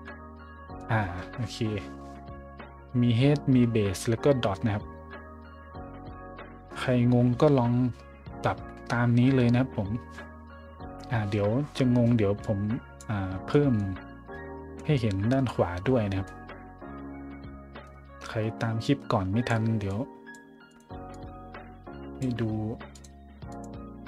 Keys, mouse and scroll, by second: 0.0-0.8 middle drag, 12.4 click, 13.3 middle click, 13.5 middle click, 14.2 scroll down 2, 14.7 middle click, 15.0-15.4 scroll up 1, 15.4-16.2 middle drag, 18.8-19.5 drag, 19.8-20.3 drag, 20.6 click, 21.1-22.2 drag, 22.9 click, 23.5 click.